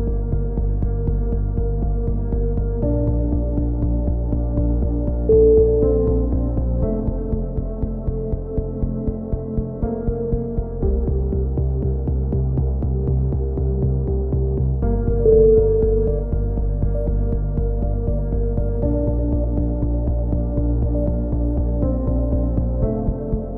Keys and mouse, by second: 1.1 z, 2.4 KP_3, 3.2 click, 3.9 click, 3.9 z, 4.9 click, 5.2-6.8 right drag, 6.5 z, 6.7 click, 7.1 e, 7.2 click, 8.0 a, 8.4 click, 8.4 right click, 9.0 f, 9.3 KP_3, 9.8 a, 9.9 z, 10.9 click, 12.0-14.3 drag, 14.3 z, 15.4 z, 16.3 right click, 16.9 click, 17.2-19.4 typing, 17.7 click, 18.4-19.4 right drag, 20.7 a, 20.8 z, 21.1-22.2 drag, 21.5 z, 22.2 right click, 22.5 click, 22.5 f, 22.6 e, 23.0 ctrl+z, 23.3 e.